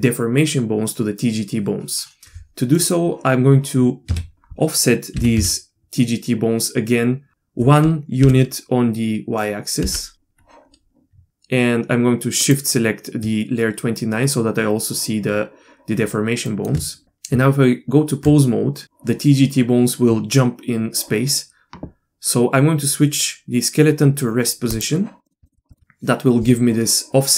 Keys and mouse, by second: 2.8 middle click, 4.1 a, 5.1 g, 12.5 shift+click, 16.5 shift+middle click, 17.3 Tab, 24.7 click, 25.2 middle click, 25.4 shift+middle click, 25.7 shift+middle click.